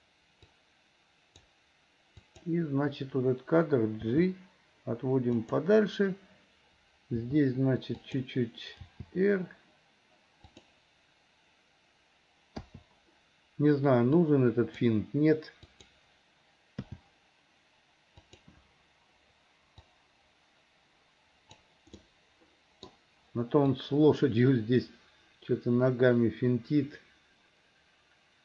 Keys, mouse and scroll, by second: 0.6 click, 2.2 click, 4.1 g, 7.2 r, 8.8 g, 12.7 i, 14.3 click, 15.7 click, 16.8 g, 19.9-21.7 drag, 22.0 middle click, 23.8-28.4 drag.